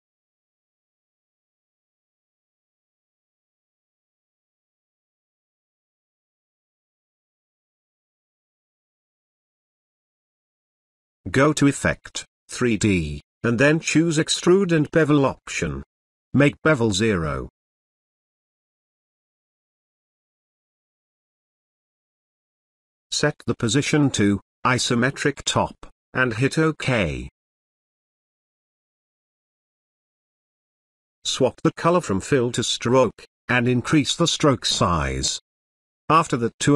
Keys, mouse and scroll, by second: 1.9 Down, 5.2-6.8 drag, 9.0 space, 9.2-9.9 ctrl+drag, 17.0 click, 23.1 click, 25.4 click, 31.4 click, 36.5 click.